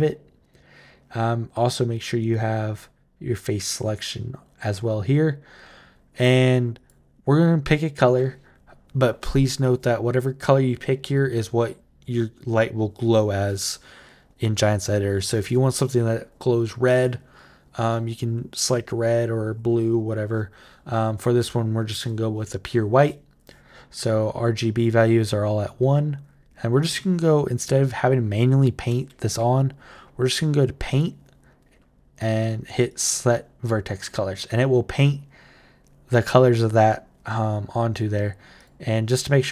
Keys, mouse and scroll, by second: 6.5 click, 30.7 click, 32.6 click, 38.4 click, 38.9 click.